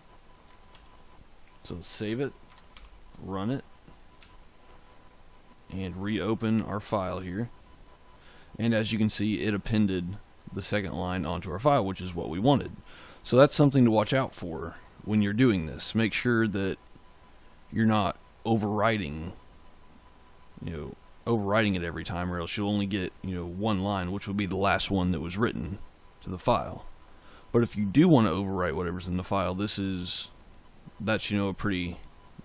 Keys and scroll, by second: 0.6 ctrl+s, 2.7 ctrl+shift+z, 4.1 d.